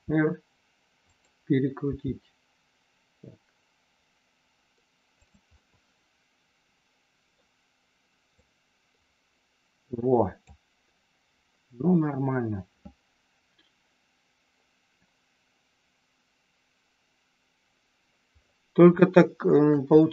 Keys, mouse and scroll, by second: 1.1 click, 1.8 g, 5.2 click, 5.5 scroll up 1, 5.6-7.3 middle drag, 8.2-10.3 drag, 19.1 shift+middle click, 20.0 scroll up 1.